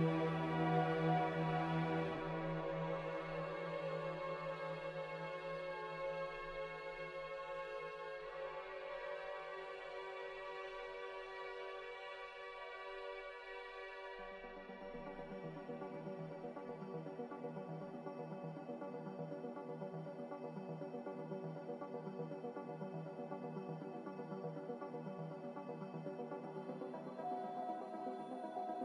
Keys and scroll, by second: 5.1 z, 12.6 z, 16.1 typing, 18.3 z.